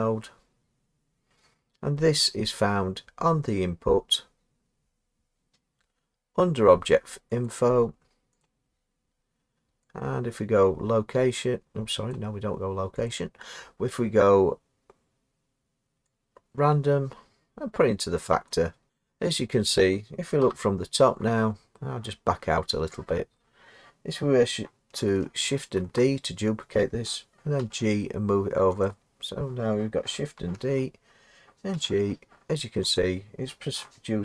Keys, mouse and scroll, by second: 7.5 click, 8.4 click, 12.1 click, 13.1 click, 18.5 click, 19.1 scroll, 20.4 7, 21.7-22.2 scroll, 22.2-28.9 middle drag, 22.2-23.9 scroll down 6, 23.9-25.4 scroll down 1, 25.4-27.6 scroll down 1, 25.8 d, 27.6-28.7 scroll down 1, 27.6 g, 28.7 scroll down 1, 28.9-31.9 drag, 30.6 d, 31.7 g, 33.0 click.